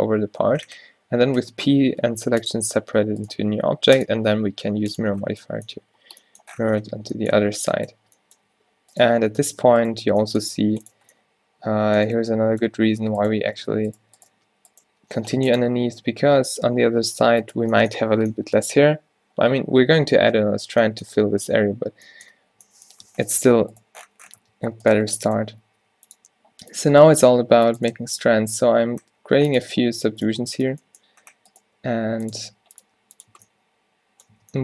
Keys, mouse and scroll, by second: 1.4 p, 2.9 Tab, 7.0 Tab, 7.5 Tab, 8.0 Tab, 8.5 z, 10.1 z, 10.5 g, 11.0 Tab, 13.2 Tab, 13.6 Tab, 14.1 Tab, 14.4 Tab, 14.9 g, 16.0 Tab, 16.3 Tab, 16.9 g, 17.7 Tab, 22.7 a, 23.1 a, 24.4 Tab, 24.7 Tab, 25.0 Tab, 25.7 ctrl+r, 27.5 ctrl+r, 28.1 ctrl+r, 31.8 g, 32.5 r, 32.9 g, 33.4 Tab, 34.5 Tab.